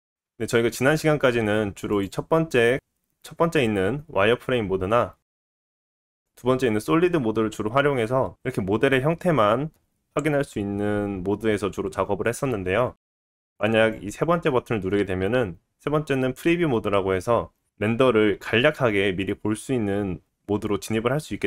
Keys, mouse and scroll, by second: 0.0-1.9 middle drag, 0.0 click, 1.9 click, 2.2-4.9 middle drag, 5.0-6.0 middle drag, 6.0 click, 6.1-8.9 middle drag, 9.1-12.8 middle drag, 13.9 click, 14.0-21.4 middle drag.